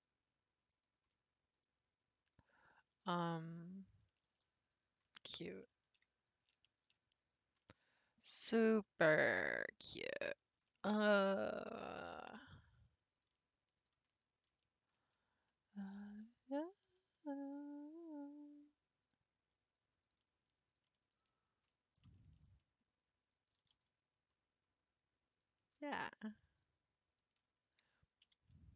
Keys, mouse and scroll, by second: 1.1 middle click, 2.1 scroll up 2, 2.3 middle click, 2.9 ctrl+r, 4.3 ctrl+r, 5.0 middle click, 5.9 ctrl+r, 6.8 ctrl+r, 7.6 middle click, 8.2-8.6 scroll up 4, 8.6-10.9 shift+middle drag, 10.9-11.3 scroll up 5, 11.3-12.7 middle drag, 12.7 3, 13.2 click, 13.8 shift+click, 14.1 middle click, 14.6 shift+scroll up 1, 14.9-16.6 shift+middle drag, 16.6 scroll down 1, 16.9 g, 20.0 click, 20.7 click, 21.1 shift+click, 21.7-23.6 middle drag, 23.6 g, 25.7 scroll up 1, 25.7 middle click, 26.3 scroll up 1, 26.6 click, 27.1 click, 27.6 shift+click, 28.2 g.